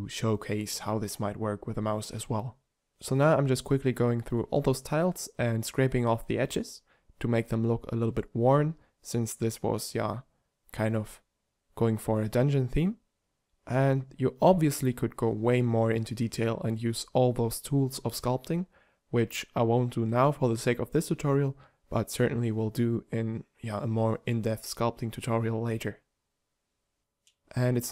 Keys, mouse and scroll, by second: 26.1 click.